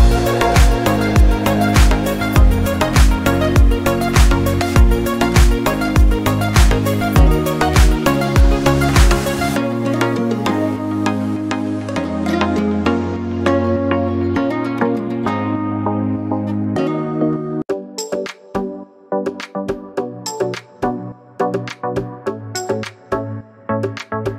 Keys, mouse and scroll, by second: 0.1 click, 1.3 scroll up 1, 3.2 click, 5.0 click, 6.5 click, 8.0 click, 16.7 scroll up 1, 17.3 scroll down 1, 18.2 click, 22.9 click.